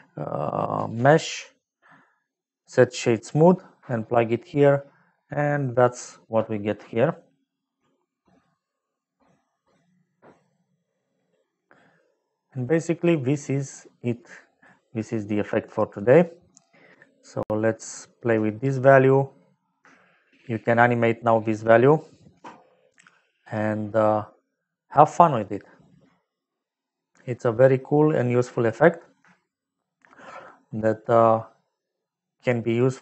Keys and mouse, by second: 1.3 click, 2.5 click, 9.4 middle click, 11.8 middle click, 14.1 middle click, 15.7 middle click, 17.2 click, 19.8 shift+middle click, 22.3 Home, 24.8 click, 29.2 shift+middle click, 30.9 middle click.